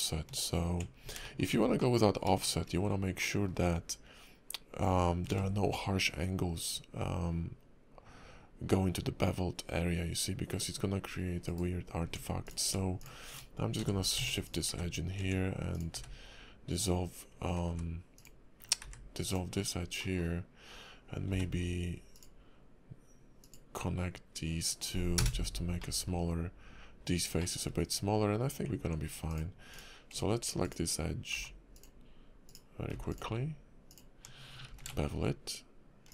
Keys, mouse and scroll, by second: 1.2 shift+middle click, 1.5 scroll up 2, 1.8 middle click, 2.4 shift+middle click, 3.2 middle click, 5.3 ctrl+b, 12.0 Tab, 12.5 click, 13.0 shift+click, 13.8 j, 14.1 Tab, 14.4 click, 14.7 x, 15.2 Tab, 15.7 click, 15.9 x, 17.7 x, 18.8 x, 19.6 scroll down 2, 20.0 middle click, 21.3 k, 25.8 middle click, 27.4 shift+middle click, 27.7 scroll up 1, 28.4 Tab, 28.6 Tab, 29.7 click, 30.6 ctrl+click, 31.3 ctrl+z, 31.7 ctrl+click, 32.4 ctrl+click, 32.9 ctrl+z, 33.1 ctrl+click, 33.9 ctrl+click, 34.7 ctrl+b.